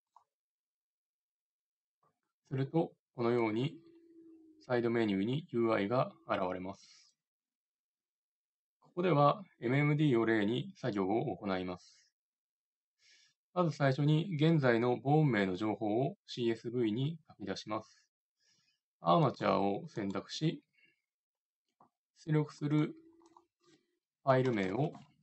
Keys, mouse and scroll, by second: 19.1-22.5 right drag, 22.5-24.3 drag, 24.5 Left, 24.6 Left.